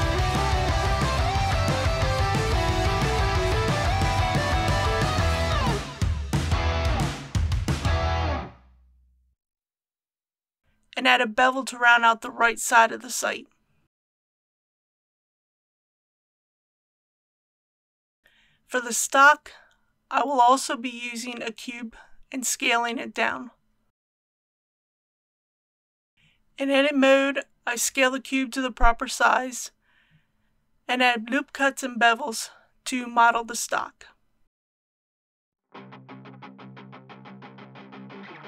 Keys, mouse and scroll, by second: 0.0-0.8 typing, 4.4 click, 6.5-7.7 middle drag, 8.2 click, 10.7 ctrl+b, 13.9 click, 14.5 alt+a, 15.7 Tab, 17.0 KP_1, 18.0 alt+a, 19.8 click, 20.9 s, 22.7 click, 23.1 g, 23.7 shift+y, 27.9 click, 30.7-31.4 typing, 31.8 Return, 35.0-36.2 typing, 36.1 click, 36.6 click, 38.3 Tab.